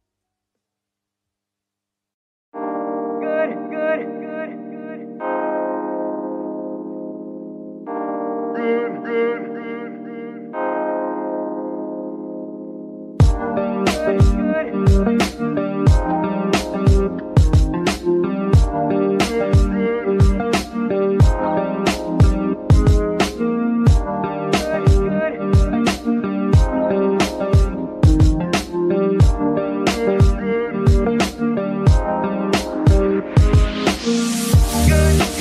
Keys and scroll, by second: 3.2 KP_Divide, 6.2 Tab, 23.3 g, 23.4 y, 27.2 Escape, 28.7 z, 29.5 Escape, 33.2 Escape.